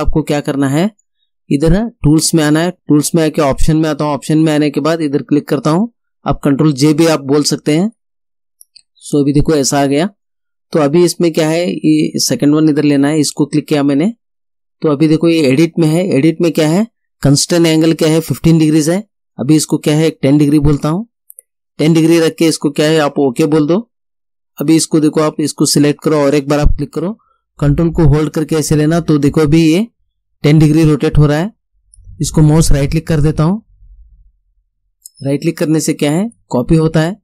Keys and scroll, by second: 20.5 1, 20.8 0.